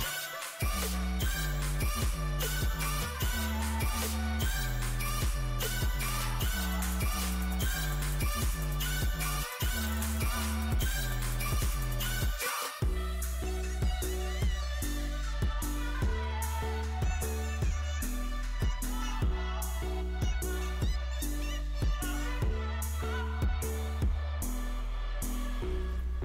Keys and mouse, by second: 3.7 e, 4.5-6.2 drag, 5.3 Tab, 6.2 Tab, 6.9 z, 8.5-9.7 drag, 14.0 ctrl+z, 15.4 z, 16.5 s, 20.2 click, 20.6 a, 20.8 a, 24.3-26.2 drag.